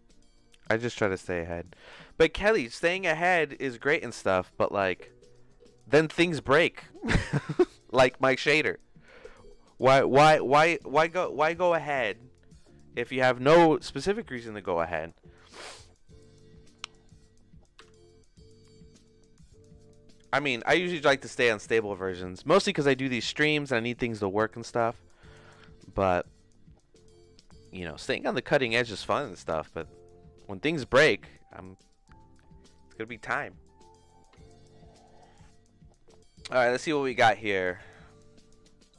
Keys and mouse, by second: 17.8 n, 21.3 middle click, 35.5 click.